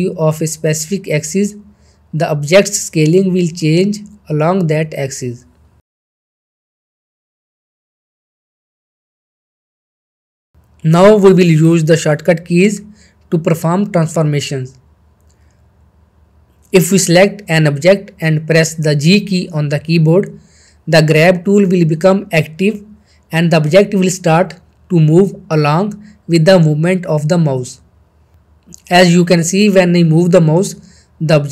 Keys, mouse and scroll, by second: 1.4 ctrl+z, 2.0-3.2 drag, 3.4 ctrl+z, 4.2-6.0 drag, 6.0 ctrl+z, 7.3-8.5 shift+drag, 8.6 ctrl+z, 8.8 scroll down 1, 8.9 middle click, 9.0 shift+middle click, 11.2 shift+middle click, 11.9 n, 12.9-14.1 middle drag, 16.9 click, 19.0 click, 19.1 middle click, 20.8 g.